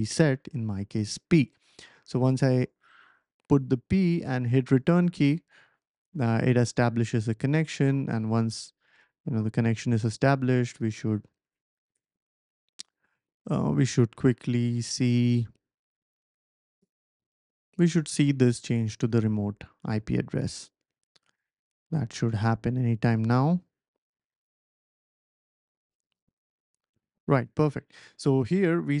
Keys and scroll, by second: 0.8 typing, 1.3 Return, 16.3 typing.